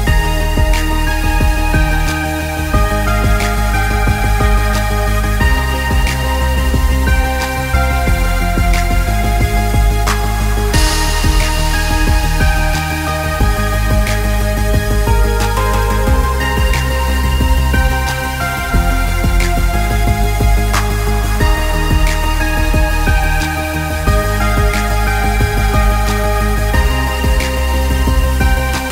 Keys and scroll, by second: 25.3 ctrl+space.